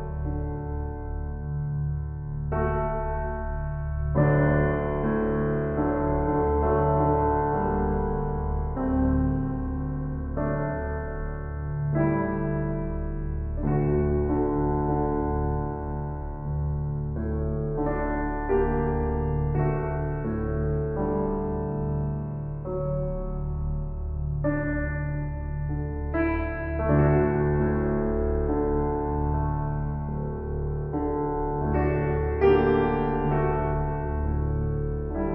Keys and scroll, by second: 27.9 ctrl+i.